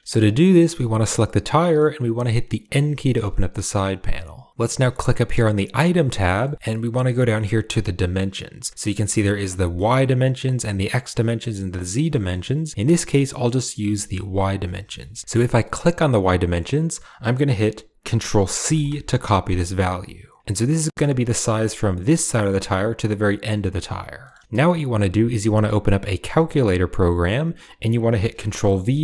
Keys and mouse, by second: 0.0 ctrl+z, 1.6 middle click, 2.7 n, 3.4 click, 4.9 click, 6.4 shift+middle click, 8.8-9.8 drag, 10.3 click, 11.4 click, 13.0-14.4 shift+drag, 14.4 shift+middle click, 14.9 shift+middle click, 15.7-20.4 drag, 20.6 shift+middle click, 24.1 middle click.